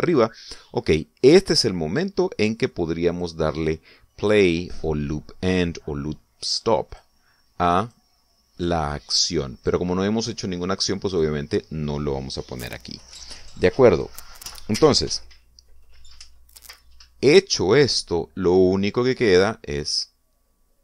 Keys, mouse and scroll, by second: 4.1 click, 7.9 click, 8.8 click, 10.6 click, 12.1 click, 20.4-20.8 drag.